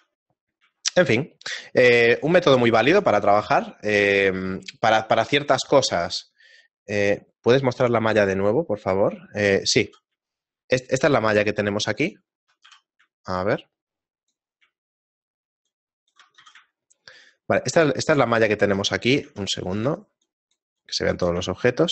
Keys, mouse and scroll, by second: 0.1 scroll down 1, 0.9 shift+middle click, 0.9 scroll down 3, 1.2 middle click, 1.7-2.1 scroll down 2, 2.0 shift+middle click, 2.5 middle click, 2.8 ctrl+middle click, 3.3 shift+middle click, 10.3 shift+middle click, 13.4 a, 14.3 click, 15.7 shift+click, 16.4 z, 16.8 shift+middle click, 20.2 alt+click, 20.8 alt+click, 21.6 shift+middle click.